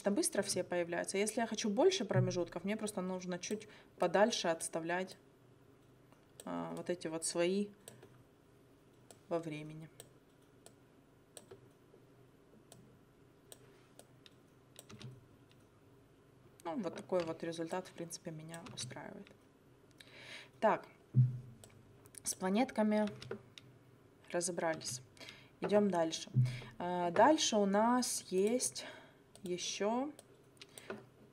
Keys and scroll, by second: 15.0 space, 18.6 space, 23.1 space, 24.8 space.